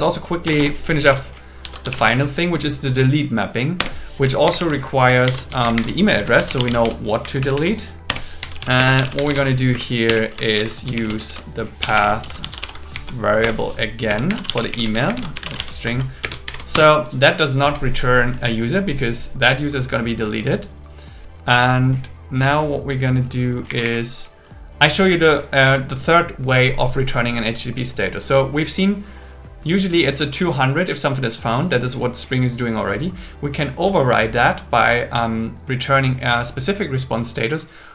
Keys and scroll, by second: 0.5 Return, 1.0 alt+l, 1.6 shift+d, 3.8 Return, 4.2-5.3 typing, 5.6 alt+8, 5.8 alt+9, 6.2 Left, 7.2 Right, 8.1 Return, 8.8 space, 10.1-13.0 typing, 11.0 alt+l, 13.4 Return, 14.1-16.2 typing, 15.8 Right, 16.5 alt+8, 16.7 Return, 23.7 Up.